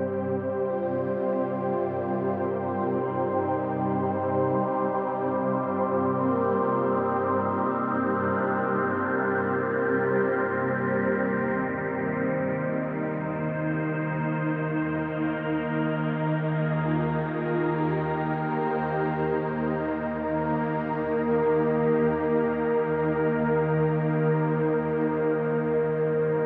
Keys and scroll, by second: 9.4 f, 10.1 f, 11.3 f, 24.6 ctrl+space, 25.2 space, 26.3 space.